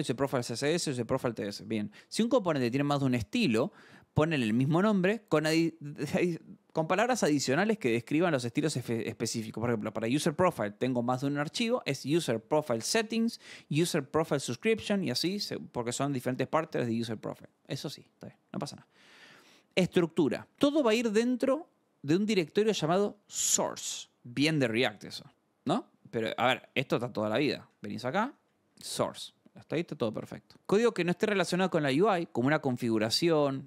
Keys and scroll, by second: 18.9 scroll, 22.7 scroll, 24.1 scroll, 26.4 alt+Tab, 27.3 shift+;, 28.4-29.4 typing.